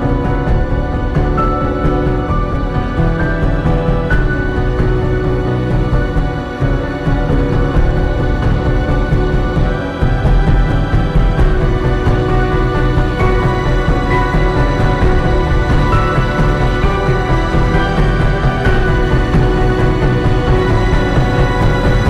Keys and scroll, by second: 6.6 space, 8.4 ctrl+z, 17.5 space, 20.0 space, 21.5 space.